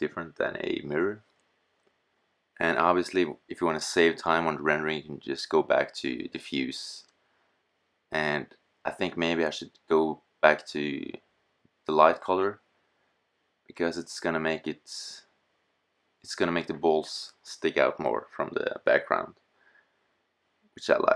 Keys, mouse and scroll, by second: 3.5-5.4 drag, 9.3-9.6 middle drag, 10.4 middle click, 10.9 scroll up 2, 11.3 middle click, 15.1-21.1 middle drag.